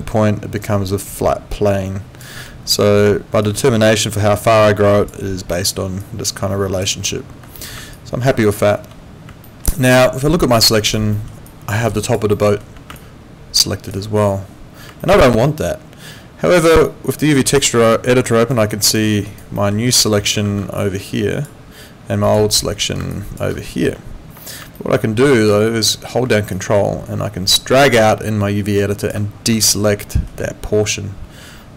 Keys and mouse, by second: 7.3 Escape, 7.9 alt+click, 8.4 alt+middle click, 9.4 alt+middle click, 9.9 alt+click, 11.1 alt+middle click, 11.5 alt+click, 12.3 alt+middle click, 13.0 alt+click, 15.0 alt+middle click, 16.9 click, 17.9 alt+middle click, 18.2 alt+right click, 19.5 alt+middle click, 20.4 ctrl+2, 24.7 alt+middle click, 26.5 ctrl+click, 29.6 alt+middle click.